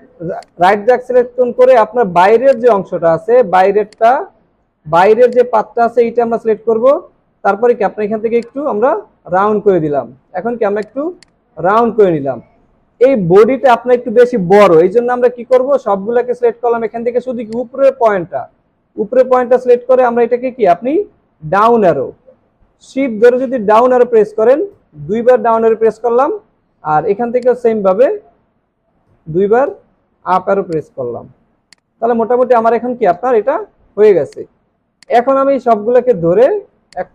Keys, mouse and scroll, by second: 2.5 shift+click, 3.9 shift+click, 5.3 shift+click, 7.5 alt+scroll up 1, 10.4 alt+scroll down 1, 10.7 space, 11.9 alt+scroll down 1, 12.1 alt+scroll up 1, 23.6 shift+Down, 26.1 scroll down 1, 29.1 shift+Up, 31.4 alt+scroll down 1, 31.7 space, 32.2-34.3 alt+scroll down 1, 36.9 alt+click.